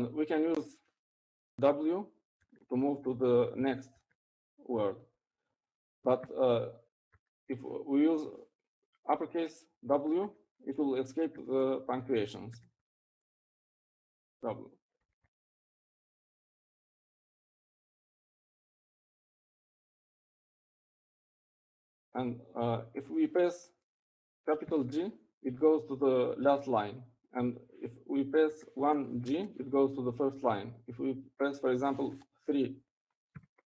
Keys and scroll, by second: 4.1 typing, 5.3 typing, 6.5 typing, 9.3-9.6 typing, 13.3 shift+w, 14.1 shift+w, 15.1 w, 16.5 shift+w, 27.3 shift+g, 31.3 1, 32.0 shift+g.